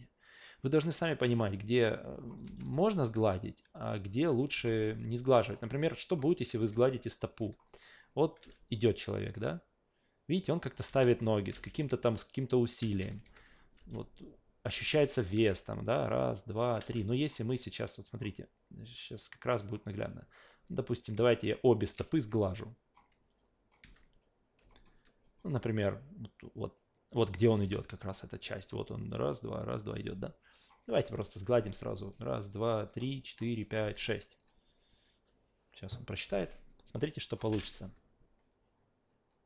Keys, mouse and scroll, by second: 2.1 click, 2.4 alt+v, 3.0 alt+right click, 3.2 alt+click, 3.9 alt+middle click, 4.3 alt+right click, 4.5 alt+v, 4.6 alt+middle click, 5.0 alt+click, 5.5 alt+middle click, 5.8 alt+click, 7.1 click, 7.6 alt+middle click, 8.1 alt+middle click, 8.4 alt+v, 8.7 alt+middle click, 10.6 alt+middle click, 10.9 alt+v, 12.8 alt+v, 13.2 q, 13.5 click, 13.8 alt+v, 14.7 alt+v, 15.2 click, 15.4 alt+v, 16.8 alt+v, 17.1 click, 17.8 click, 19.2 click, 21.5 shift+click, 22.6-22.9 drag, 23.4 click, 23.8 f, 24.7 alt+right click, 25.2 click, 25.7 click, 26.4 click, 27.6 f, 28.6 click, 30.0 click, 32.2 click, 32.5 click, 32.9 click, 33.3 click, 33.6 click, 33.9 click, 36.9 click, 37.5 alt+v.